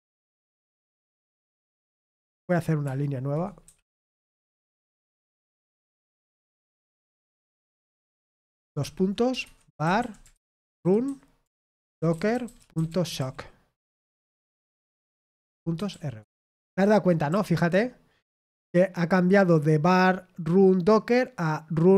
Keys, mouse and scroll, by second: 11.0-13.6 typing.